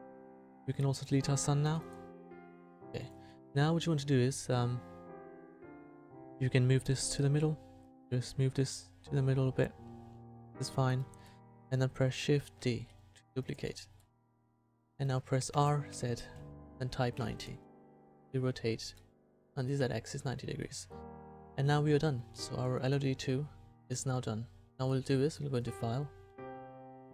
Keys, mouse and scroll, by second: 1.6 Delete, 6.1 KP_1, 7.9-10.4 drag, 12.6 shift+d, 15.5 r, 19.8 a, 25.6-27.1 drag.